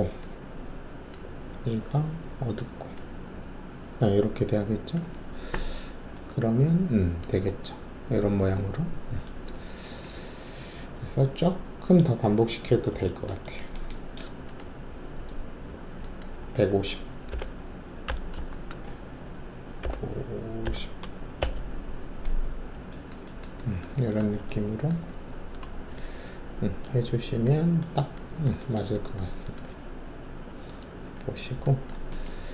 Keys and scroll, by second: 16.6-18.6 typing, 18.3 Tab, 20.6 5, 20.6 0, 21.4 Return, 25.1 alt+`.